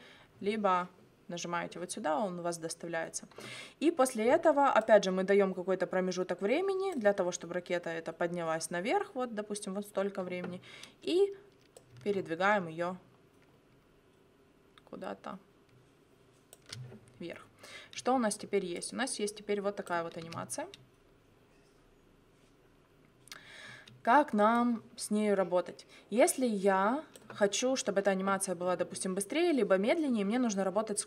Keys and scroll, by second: 20.2 space, 23.7 space.